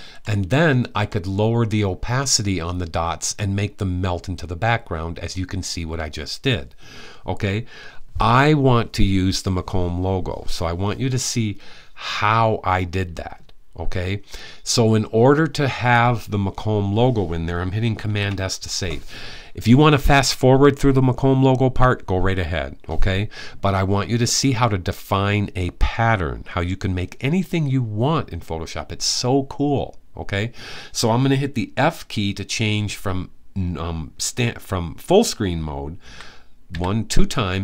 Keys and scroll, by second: 17.8 super+s, 35.8-36.5 typing.